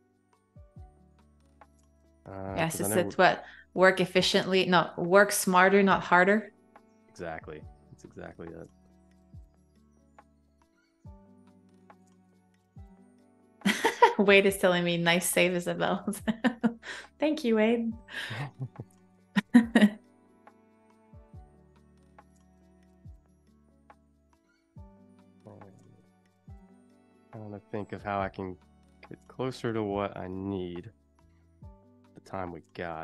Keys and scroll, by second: 3.1 super+-, 3.8 space, 4.8 super+=, 6.4 i, 7.2 a, 10.1 v, 16.0 shift+super+[, 17.1 a, 20.7 =, 21.2 a, 23.2 Escape, 24.0 space, 31.3-32.3 typing.